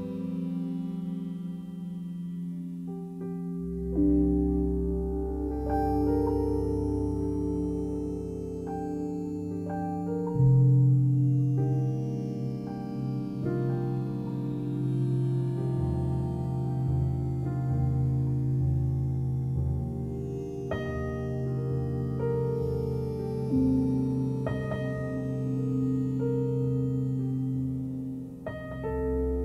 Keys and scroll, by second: 8.4 3, 9.7 Return, 23.3 m.